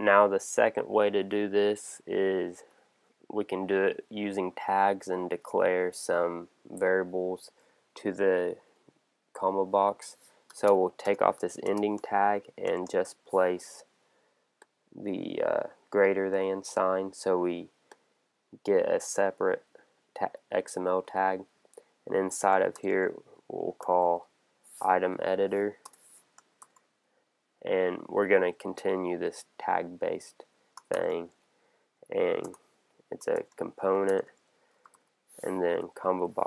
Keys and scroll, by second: 12.6 shift+., 22.7 shift+,, 25.1 Down, 25.8 Return, 30.9 shift+<, 32.4 Return, 35.8 Down.